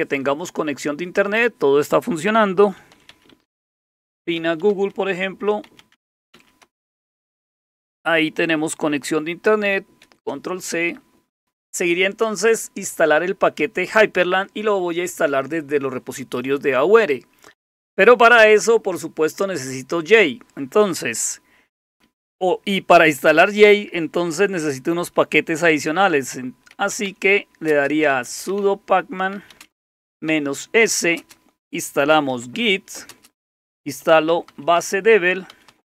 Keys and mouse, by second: 2.5-6.8 typing, 9.8-10.5 typing, 25.8-35.9 typing.